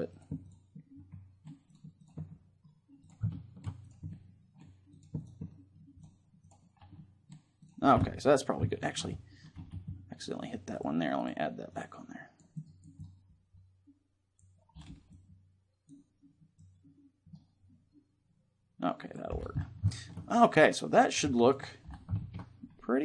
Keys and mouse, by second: 0.9-9.1 drag, 10.9-14.5 drag, 10.9 middle click, 14.9-18.1 drag, 19.3-20.8 middle drag, 21.3-23.0 drag, 21.6 middle click.